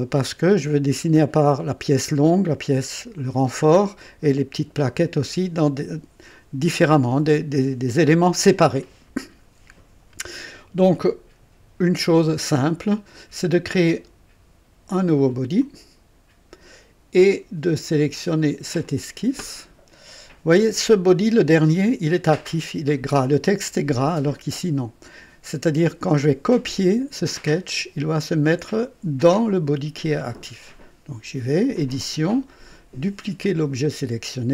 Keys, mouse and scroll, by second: 12.6 click, 15.6 click, 17.9 click, 18.8 click, 31.7 click, 33.4 click.